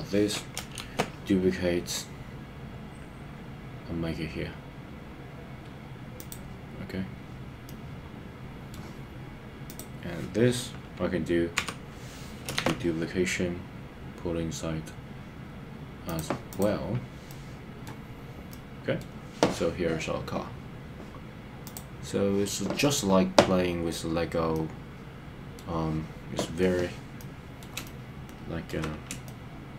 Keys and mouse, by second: 0.9 shift+d, 6.2 click, 7.6-8.7 middle drag, 11.6 KP_3, 12.6 shift+d, 16.1 click, 17.3 middle click, 18.5 middle click, 24.5-25.6 middle drag, 27.2 middle click, 27.8 middle click, 29.2 middle click.